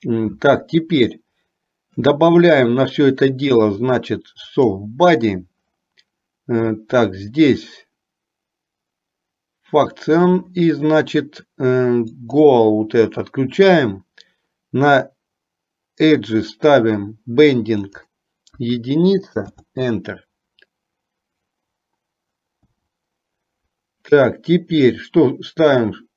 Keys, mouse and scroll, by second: 4.6 click, 12.3 click, 18.1-22.9 drag.